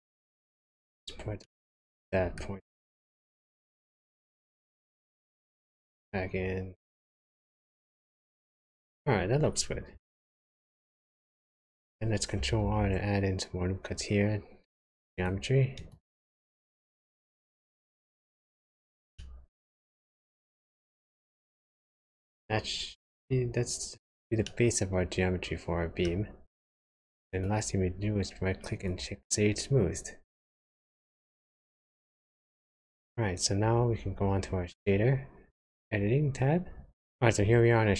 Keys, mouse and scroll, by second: 0.5 click, 1.4 middle click, 2.9 g, 7.5 middle click, 9.2-9.9 scroll down 6, 10.2 shift+middle click, 11.7-12.4 scroll up 1, 12.4 scroll up 1, 12.6 ctrl+r, 16.7 click, 17.3-17.8 scroll down 2, 17.8 middle click, 19.2 shift+middle click, 19.2 shift+scroll down 1, 20.5 Tab, 24.4 middle click, 27.3 right click, 31.8 middle click.